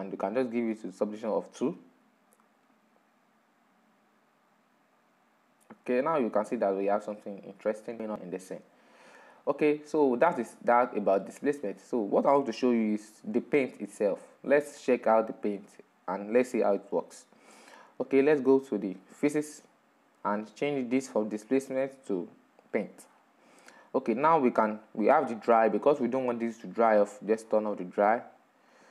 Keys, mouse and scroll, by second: 0.6-3.1 middle drag, 3.1-6.3 drag, 9.1-9.5 drag, 9.5-10.2 middle drag, 10.2 scroll up 4, 10.6-11.6 middle drag, 11.6-12.0 scroll down 4, 12.0-15.7 middle drag, 15.7-16.4 drag, 16.4-19.4 middle drag, 20.1 click, 20.9 click, 21.7 click, 22.3-23.6 scroll down 6, 23.6-26.6 drag, 26.8-28.9 scroll down 1.